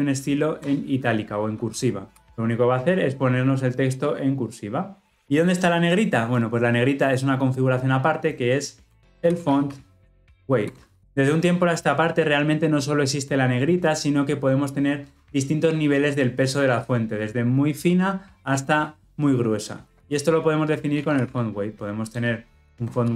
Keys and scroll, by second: 22.1 Return.